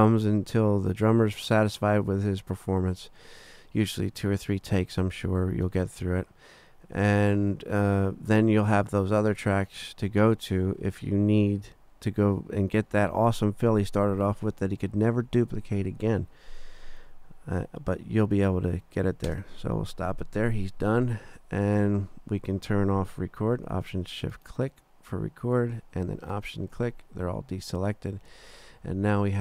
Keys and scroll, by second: 19.2 space.